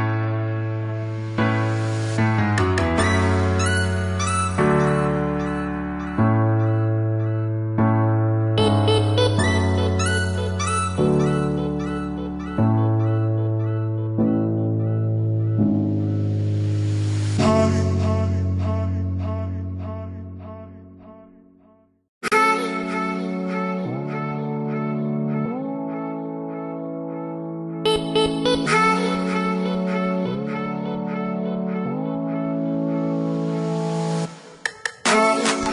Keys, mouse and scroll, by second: 0.0 scroll down 1, 1.3 click, 3.9 right click, 5.2 click, 5.9 click, 8.6 click, 12.6 KP_3, 13.1 KP_Enter, 15.1 click, 17.9 middle click, 21.6 click, 27.3 click, 28.9 click, 31.7 click, 33.2 middle click.